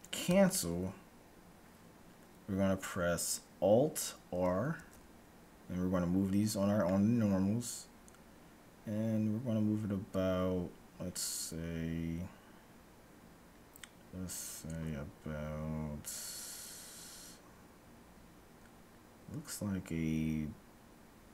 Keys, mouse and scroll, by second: 4.8 alt+s.